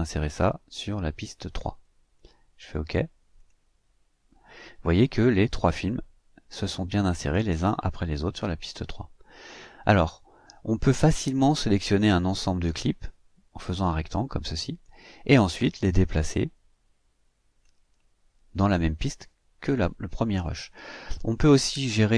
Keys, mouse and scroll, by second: 0.2 click, 1.2 click, 3.3 click, 11.9-14.0 drag, 15.4-17.8 drag.